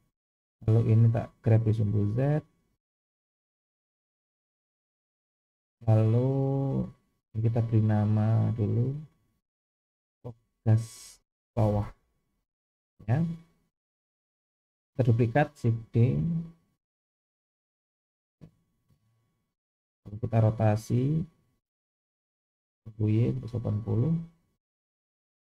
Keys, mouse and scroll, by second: 0.6 click, 1.5 g, 4.6-4.9 scroll down 2, 5.1 shift+middle click, 6.1 click, 8.2 click, 8.8-12.7 drag, 15.7 shift+d, 20.7 r.